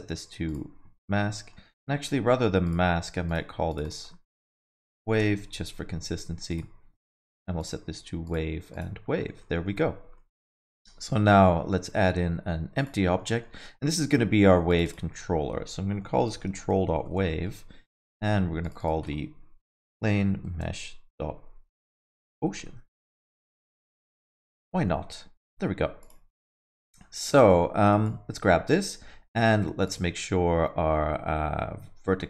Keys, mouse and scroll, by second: 1.3 middle click, 2.6 click, 3.3 click, 3.7 click, 3.8 click, 6.5 click, 7.1 click, 8.2 click, 9.1 middle click, 9.6 middle click, 10.0 scroll up 1, 10.1 alt+middle click, 10.5 shift+a, 13.0 alt+middle click, 13.3 middle click, 13.6 alt+middle click, 14.7 click, 14.8 click, 18.6 click, 18.8 click, 24.1 alt+middle click, 24.5 scroll up 3, 24.7 middle click, 25.3 click, 26.0 click, 26.3 alt+middle click, 27.9 click, 29.8 click.